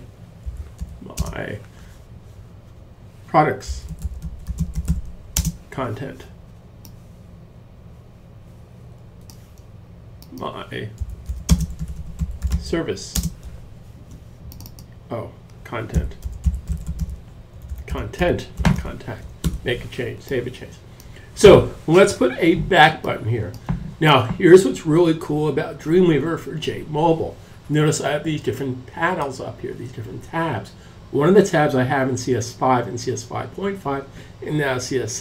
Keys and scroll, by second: 0.0-0.9 typing, 2.5-4.8 typing, 6.3-7.6 typing, 10.0-13.5 typing, 15.2-22.0 typing.